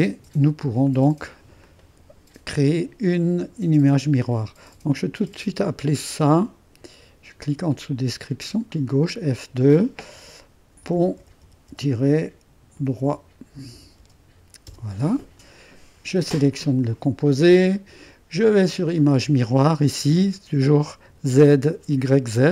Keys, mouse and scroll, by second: 1.3 middle click, 1.6-7.0 drag, 8.2-9.2 drag, 9.2-14.5 typing, 14.6 Return, 16.5-18.0 drag, 18.0 typing, 18.9 click, 21.1-22.0 typing.